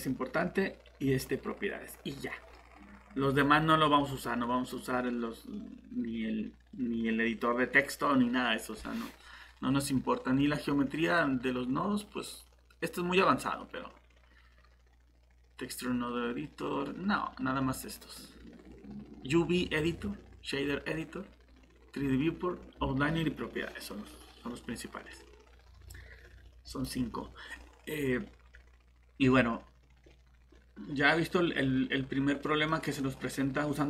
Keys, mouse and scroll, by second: 32.7 middle click.